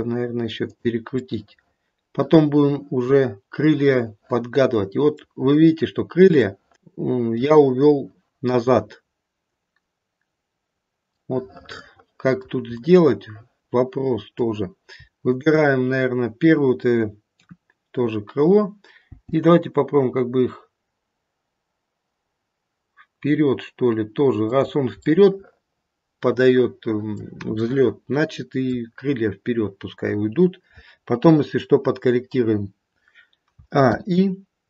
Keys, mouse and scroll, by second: 1.2 middle click, 2.2 middle click, 4.6 middle click, 5.1 middle click, 5.5-6.2 scroll up 1, 6.2 scroll up 1, 6.4 shift+middle click, 6.8 middle click, 11.1 middle click, 11.8 middle click, 13.0 middle click, 13.1 middle click, 15.2 shift+click, 17.3 KP_3, 19.0 g, 25.1 middle click, 26.2 middle click, 27.1 middle click, 27.7 middle click, 28.1 middle click, 28.4 middle click, 28.8-29.7 scroll down 2, 33.5 a, 33.7 i.